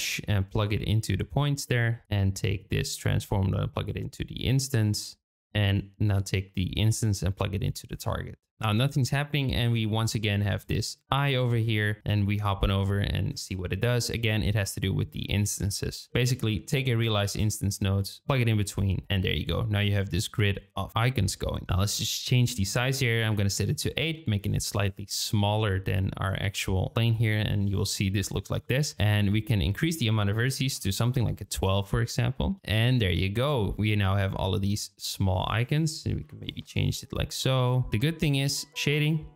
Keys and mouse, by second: 0.7-1.3 drag, 2.8-4.3 drag, 4.3-5.4 drag, 6.2-8.3 drag, 10.7 shift+middle click, 16.1 shift+middle click, 16.1 click, 16.5 shift+middle click, 17.1 shift+d, 21.3 shift+middle click, 21.8-24.6 drag, 25.2 click, 26.0 middle drag, 29.3-31.7 drag, 32.5 KP_0, 35.7-37.3 drag.